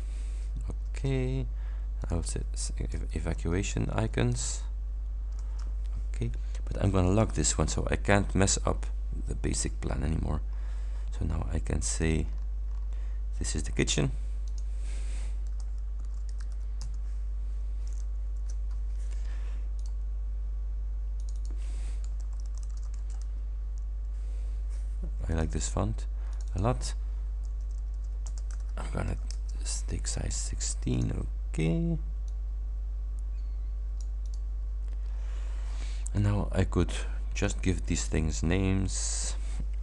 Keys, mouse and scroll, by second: 1.0 Return, 2.1 click, 3.0-4.4 typing, 5.5 Return, 7.2 click, 10.6 click, 12.0 click, 12.4-12.7 scroll down 1, 14.6 click, 15.5-16.9 typing, 18.2 shift+Home, 19.8 click, 21.2 click, 22.1-23.3 typing, 25.4 click, 26.4 click, 27.6 BackSpace, 29.1 shift+ß, 29.4 shift+Return, 31.0 click, 32.3-34.6 drag, 35.2 scroll up 2, 35.4-35.8 scroll down 2, 35.8-36.4 scroll up 3, 37.5 click, 39.2 click.